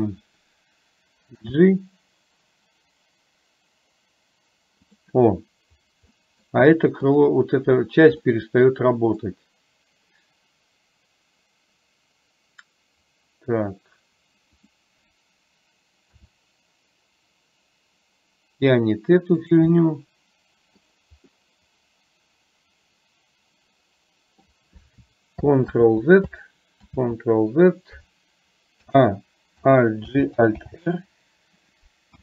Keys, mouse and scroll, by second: 1.5 g, 6.3 middle click, 8.4-9.4 middle drag, 14.6 click, 16.1 r, 19.9-20.8 middle drag, 21.4-24.5 middle drag, 25.9 ctrl+z, 26.9 ctrl+z, 28.9 a, 30.1 alt+g, 30.8 alt+r, 32.1 KP_1.